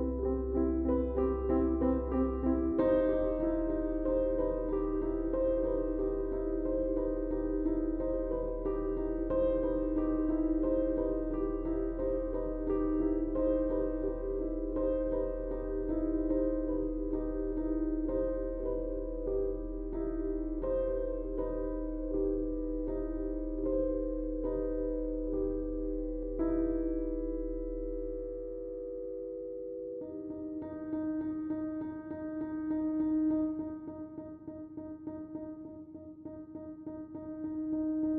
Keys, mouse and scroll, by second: 3.1 click, 4.3 Tab, 5.3 click, 9.7 click, 10.7 click, 13.9 Tab, 18.1 click, 19.5 Tab, 26.4 click, 30.2 Tab, 33.3 Tab, 33.9 Tab, 36.7 click, 38.0 Tab.